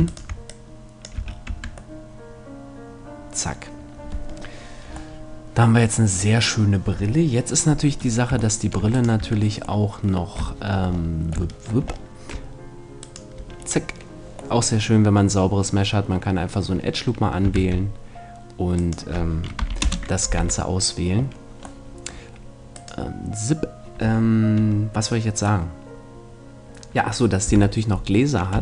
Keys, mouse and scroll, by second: 1.2 a, 1.5 Tab, 1.8 middle click, 5.2-7.4 middle drag, 8.0 middle click, 9.0 right click, 9.2 Tab, 9.8-11.6 middle drag, 13.1 right click, 13.4-17.6 middle drag, 17.6 shift+d, 19.0-20.7 right drag, 19.6 p, 20.4 Tab, 21.8-22.8 middle drag, 22.8-24.5 right drag, 27.4 KP_7.